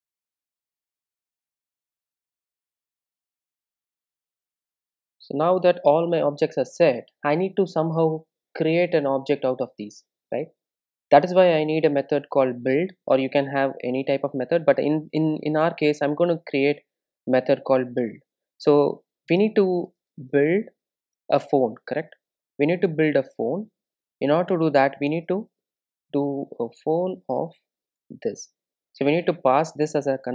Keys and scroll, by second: 14.1 Return, 18.9 Return, 24.5 Return.